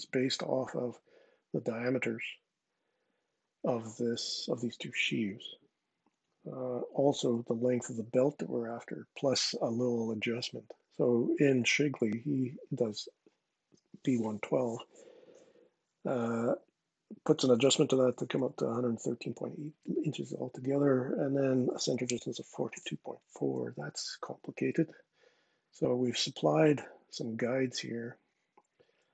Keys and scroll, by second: 23.4 super+Tab, 24.3 super+Tab.